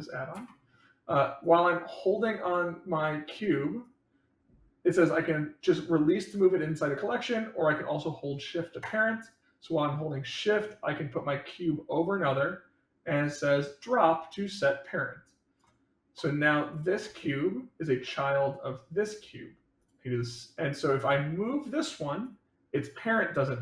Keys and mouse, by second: 1.4-2.4 drag, 3.8-15.5 drag, 16.6 click, 19.7 click, 20.9 click, 22.2-23.6 drag.